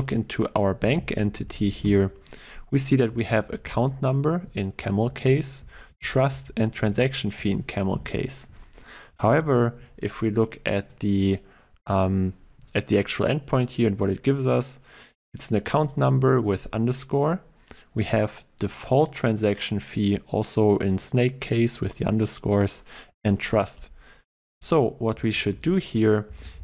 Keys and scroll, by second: 3.7 ctrl+w.